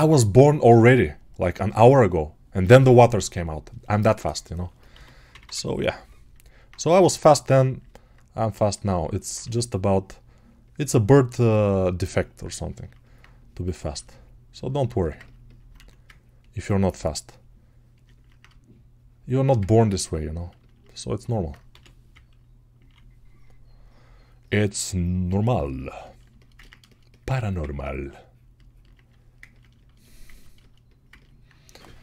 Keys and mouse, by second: 8.4-14.8 ctrl+alt+drag, 15.9 ctrl+1, 27.4 ctrl+1, 29.5-32.0 alt+shift+right drag.